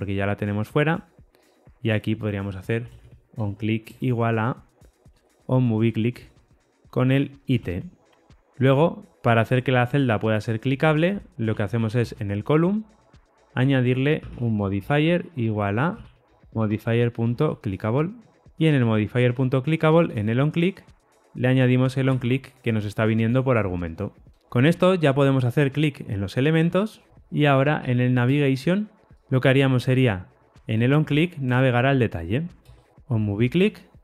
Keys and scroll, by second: 3.8 Return, 7.0 Tab, 19.1 Return, 21.0 Tab.